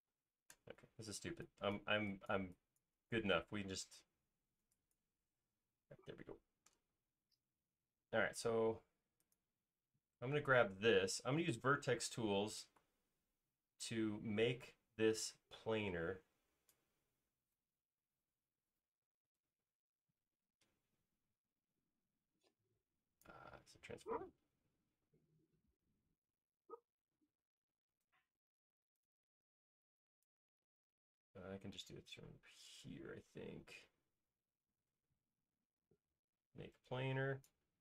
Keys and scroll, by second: 0.2-0.6 typing, 5.6 alt+space, 13.2 v.